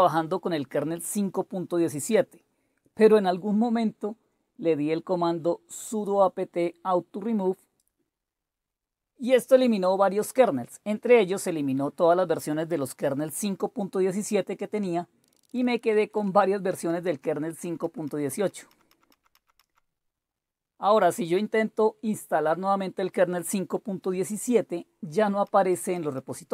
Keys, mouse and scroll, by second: 0.0-1.3 scroll down 1, 5.2 scroll down 1, 6.2-7.1 scroll down 3, 10.2 Down, 10.2 Down, 10.9 click, 14.9 click, 15.2-16.2 Down, 16.7 Down, 17.0 Down, 17.6 Up, 17.8 Up, 18.0 Up, 18.3 Up, 18.7 Up, 18.9 Up, 19.1 Up, 19.3 Up, 19.6 Up, 21.4-23.2 drag, 24.1 click, 25.4 Up, 25.7 Up, 26.1 Up.